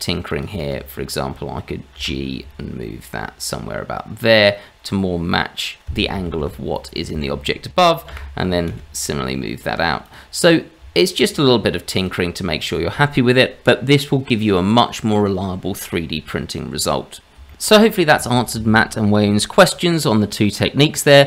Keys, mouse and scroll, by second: 0.6 shift+z, 1.9 g, 6.3 shift+z, 6.7 click, 7.1 shift+z, 8.1 g, 10.4-10.8 scroll down 2, 10.8 Tab, 11.3-11.7 scroll down 2, 11.9 click, 17.5 shift+middle click.